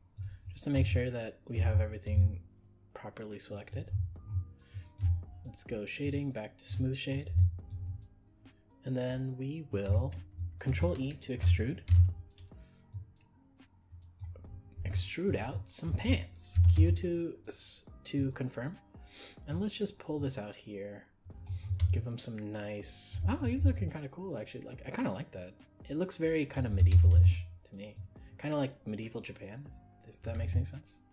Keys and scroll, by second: 11.8 ctrl+e.